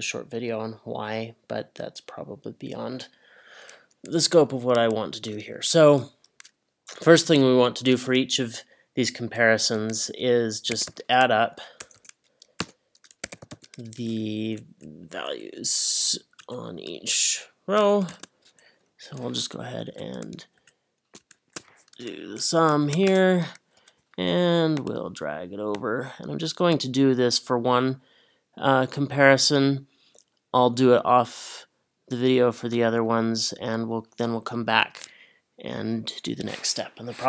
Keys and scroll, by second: 10.5-14.0 typing, 14.5 Up, 16.4 Up, 19.1 Up, 19.9 Up, 22.8 shift+0, 23.1 Return.